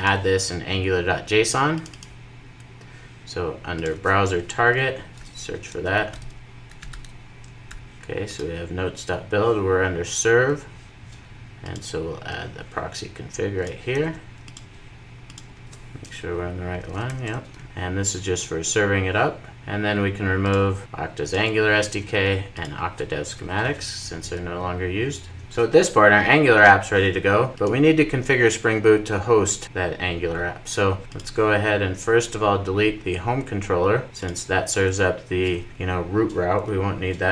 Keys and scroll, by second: 5.0 super+f, 16.9 super+v, 17.3 super+s.